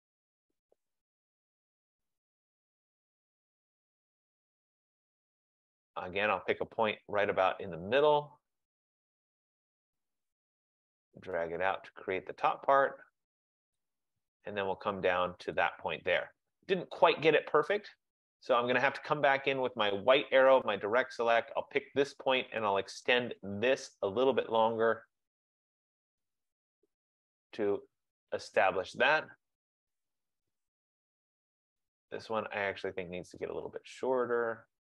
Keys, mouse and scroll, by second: 1.0 click, 3.1 click, 5.3 click, 13.9 click, 15.8 click, 17.9 click, 19.8 click, 25.3 F15, 27.5 F15, 28.9 click, 32.0 click.